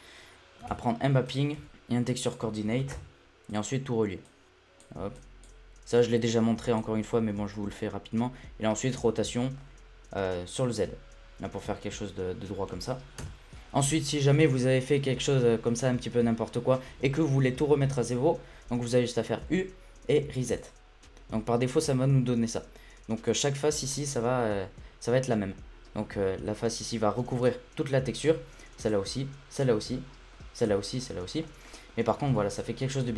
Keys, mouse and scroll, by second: 0.7 shift+a, 1.6 p, 2.9 shift+a, 3.2 o, 4.2-5.2 drag, 6.0-7.0 drag, 7.0-7.5 scroll up 5, 7.5 middle click, 7.9-8.9 scroll up 3, 8.9-13.2 drag, 13.2 Tab, 19.4 u, 23.2 click, 23.9-28.2 middle drag, 28.8 click, 29.5 click, 29.9-30.6 middle drag, 30.6-31.4 drag, 31.4-31.7 middle drag, 31.7-32.1 scroll up 1, 32.1 a, 32.2 a, 32.4-33.1 middle drag.